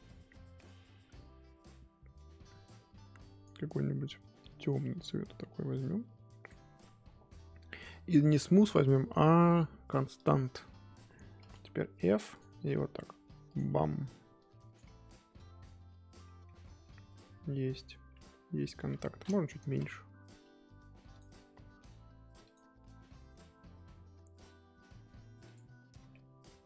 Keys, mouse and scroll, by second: 0.6-11.6 drag, 11.6 f, 13.4-15.1 drag, 15.1 middle click, 15.5-16.2 scroll down 2, 16.2 middle click, 16.6 scroll down 1, 16.8-17.9 middle drag, 17.9-18.8 scroll up 4, 18.8 KP_1, 19.0-19.6 scroll up 3, 19.6 ctrl+z, 20.4 f, 22.0 f, 25.6 click, 25.9 scroll down 1, 26.1-26.6 middle drag.